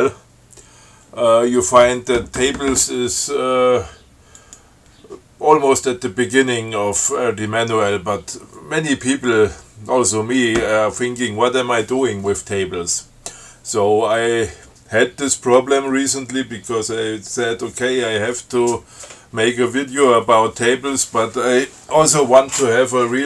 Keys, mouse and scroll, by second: 4.6 click.